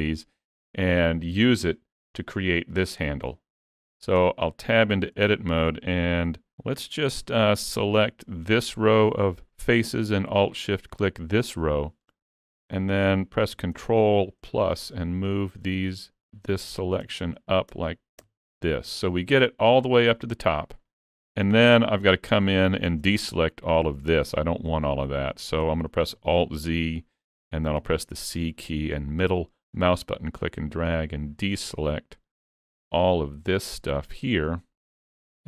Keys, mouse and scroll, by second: 4.2 Tab, 5.2 alt+a, 7.2 3, 8.8 alt+click, 10.6 alt+shift+click, 13.7 ctrl+KP_Add, 15.7 ctrl+KP_Add, 16.7 ctrl+KP_Add, 20.2 middle click, 21.4 shift+middle click, 21.8 middle click, 22.7 shift+middle click, 23.1 middle click, 24.6 scroll up 2, 24.9 shift+middle click, 26.2 alt+z, 27.8 c.